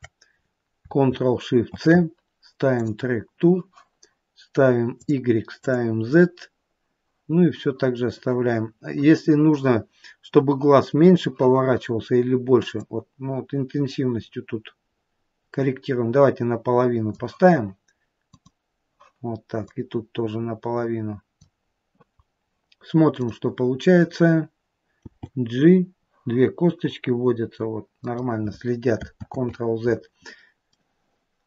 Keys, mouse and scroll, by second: 1.9 ctrl+shift+c, 5.4 click, 5.9 click, 13.0 click, 18.5 click, 20.0 click, 23.5 click, 25.3 g, 29.6 ctrl+z, 31.0 middle click.